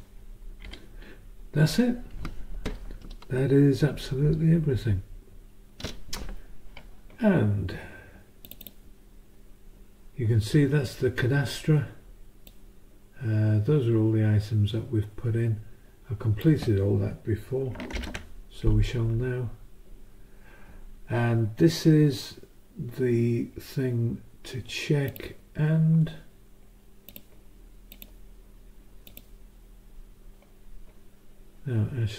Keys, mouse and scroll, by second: 8.4 click, 12.5-16.6 drag, 17.9 ctrl+shift+Up, 25.1 click, 27.1 click, 27.9 click, 29.1 click, 29.9 s.